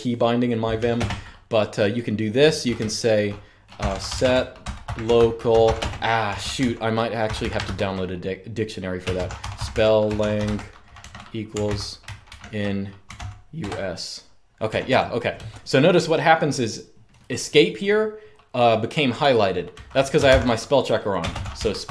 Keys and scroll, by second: 0.7 super+space, 3.2-13.3 typing, 14.4-15.0 typing, 19.4-21.9 typing.